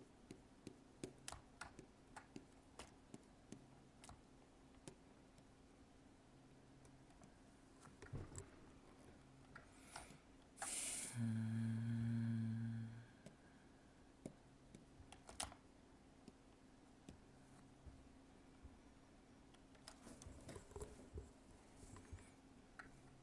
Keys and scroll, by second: 1.6 alt+space, 9.9 alt+space.